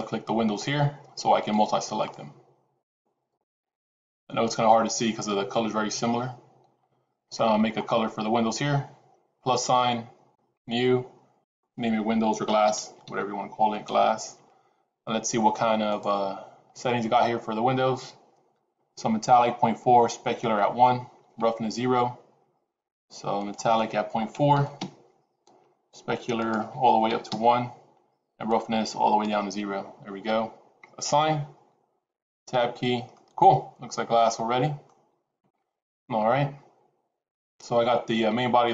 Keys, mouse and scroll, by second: 0.6 shift+click, 1.5 shift+click, 1.9 shift+click, 2.7 shift+click, 3.4 shift+click, 3.9 shift+click, 4.8 shift+click, 7.3-9.4 scroll up 11, 9.4 click, 10.5 click, 11.3 click, 13.1 s, 23.3 click, 28.4 click, 30.9 click, 32.4 Tab, 33.0 middle click.